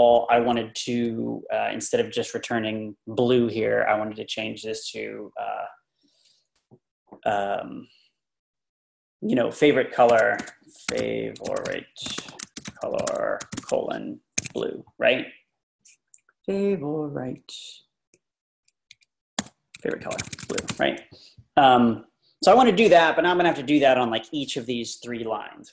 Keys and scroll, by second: 9.9-14.4 typing, 14.4 Escape, 15.5 Left, 15.8 Left, 15.9 Left, 17.3 Left, 18.5 Right, 18.9 Left, 19.4-21.8 typing, 23.2 typing, 24.1 Down, 25.6 Up.